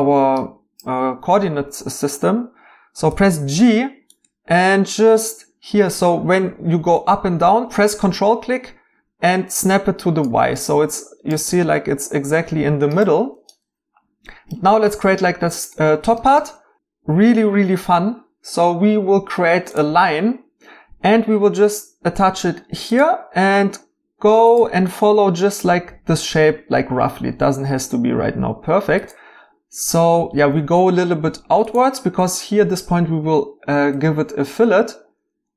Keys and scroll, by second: 3.0 g.